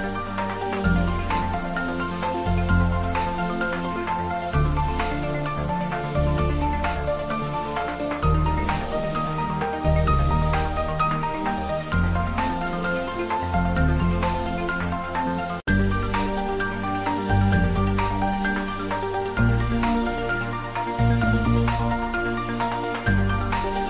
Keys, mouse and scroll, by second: 0.3 g, 2.6 click, 3.0 Tab, 4.3 middle click, 5.1 click, 5.7 e, 7.2 click, 7.4 middle click, 8.4 Tab, 8.9 ctrl+middle click, 9.9 click, 10.3 ctrl+middle click, 10.5 Tab, 10.8 click, 11.2 Tab, 11.3 click, 11.6 Tab, 12.2 click, 14.0 middle click, 15.6 2, 16.1 click, 17.3 f, 17.7 Tab, 18.3 click, 19.2 3, 19.3 click, 20.4 ctrl+z, 22.5 click, 23.0 shift+click.